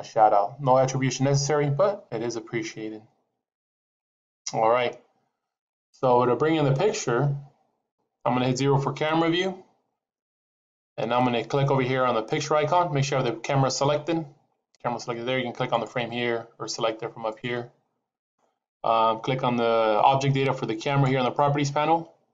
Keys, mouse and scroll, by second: 8.8 KP_0, 15.6 click, 17.2 click, 20.8 click.